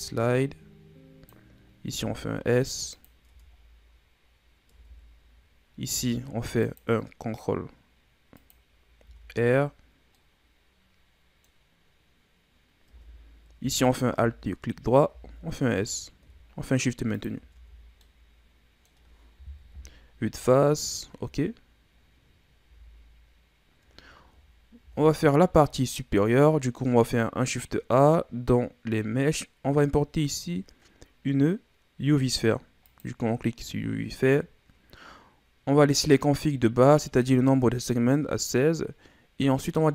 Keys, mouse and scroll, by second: 1.9 s, 3.3 Tab, 3.6 scroll down 4, 4.3-4.7 scroll up 3, 4.7 Tab, 5.8 ctrl+r, 9.0 Tab, 9.4-10.1 scroll down 3, 10.1-12.6 middle drag, 12.6 scroll up 4, 12.9 Tab, 13.9 alt+right click, 15.1 s, 17.6 Tab, 17.8 scroll down 2, 18.0-19.7 middle drag, 19.7 KP_1, 20.4 scroll down 3, 20.9 scroll up 10, 21.8-22.7 scroll up 2, 22.7 a, 23.6-24.0 scroll down 2, 24.8 shift+a, 33.7-34.6 scroll down 6, 34.6-37.7 scroll up 1.